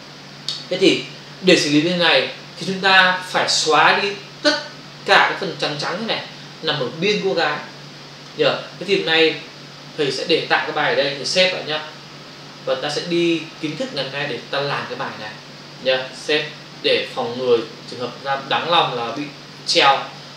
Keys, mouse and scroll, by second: 13.6 click, 16.4 click.